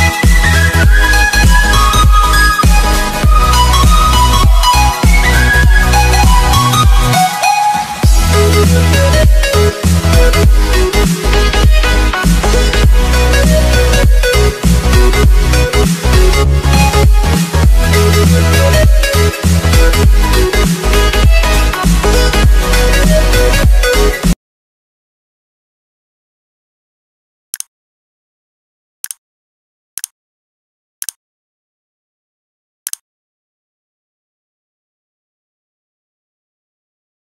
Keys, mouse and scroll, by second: 1.7 click, 5.4 s, 8.4 s, 9.6 click, 19.6 c, 20.1 click, 22.2 click.